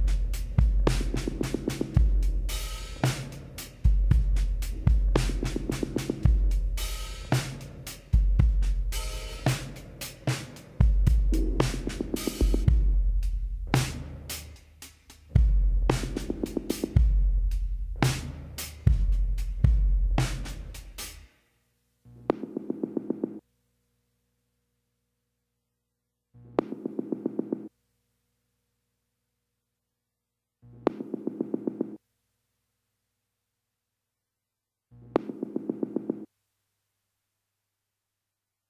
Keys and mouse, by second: 3.6 z, 5.0-7.6 drag, 7.6-9.3 middle drag, 10.1 click, 10.5-13.3 middle drag, 13.7 w, 18.1-21.0 drag, 19.9 g, 21.0 middle click, 22.0-23.8 drag, 22.2 g, 23.8 middle click, 24.1 right click, 24.2 g, 25.0 click, 25.4 right click, 26.6 right click, 26.8 g, 27.0-28.2 drag, 28.0-30.3 middle drag, 29.0 a, 30.7-32.9 drag, 30.7 middle click, 31.7 x, 33.3-35.7 drag, 34.7 l, 35.8 KP_1, 36.7 KP_3, 38.4 r.